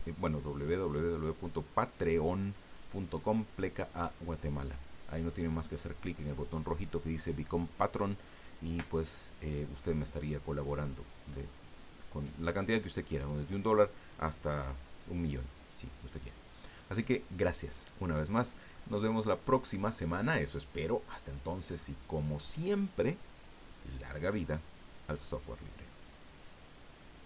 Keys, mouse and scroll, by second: 17.9 scroll down 1, 18.7-21.9 drag, 26.3 click.